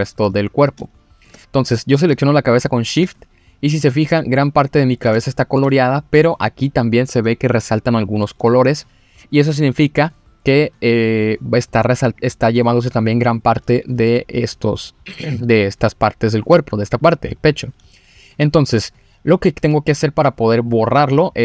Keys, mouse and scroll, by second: 0.3-0.8 scroll up 2, 0.8 shift+middle click, 2.4 shift+click, 3.3-4.0 scroll down 3, 5.1 scroll down 1, 5.2 shift+middle click, 5.7-7.0 scroll up 1, 20.0 click.